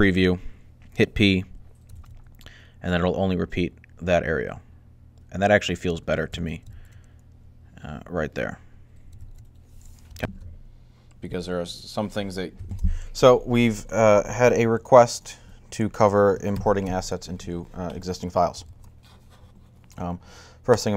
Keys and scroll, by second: 1.8 alt+a, 6.1 alt+a, 6.5 alt+a, 9.0 alt+a, 10.1 g, 12.5 alt+a, 16.3 alt+a, 18.4 Left.